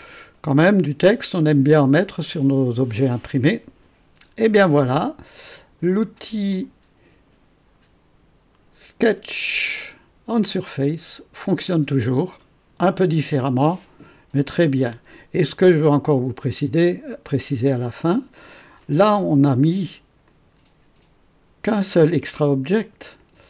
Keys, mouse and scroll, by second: 5.9 click, 6.5 click, 11.4 click, 16.2 click, 17.8 click, 20.2 click, 23.1 click.